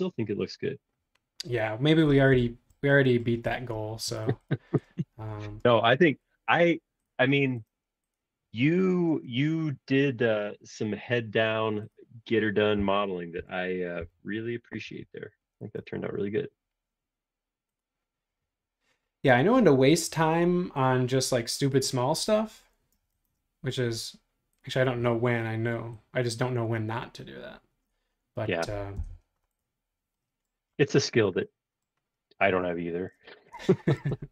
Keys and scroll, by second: 13.3 Page_Down, 14.0 Page_Down, 14.7 Page_Down, 14.7 Page_Up, 14.8 Page_Up, 15.0 Page_Up, 15.7 Return, 22.9 space, 29.0 Return.